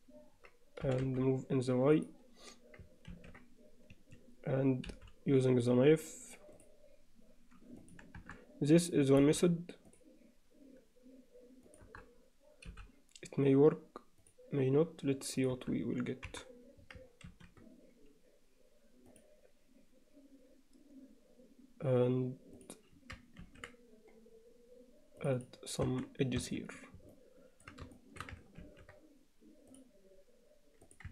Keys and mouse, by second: 0.9 g, 3.1 ctrl+r, 4.9 k, 9.2 k, 12.7 k, 16.3 KP_7, 17.3 ctrl+r, 23.4 ctrl+r, 25.9 Tab, 26.5 Tab, 27.1 alt+middle click, 27.9 shift+middle click, 28.6 ctrl+r.